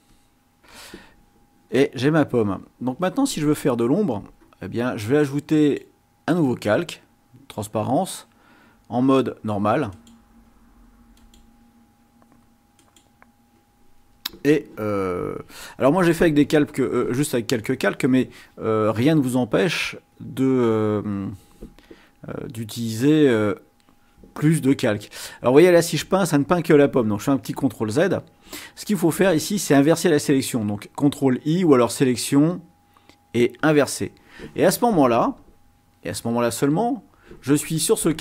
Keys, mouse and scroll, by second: 0.2 click, 5.6 click, 10.0 click, 11.2 click, 12.8 click, 20.1-21.4 drag, 22.4-23.6 drag, 27.6 ctrl+z, 31.8 click, 33.6 click, 36.7 click.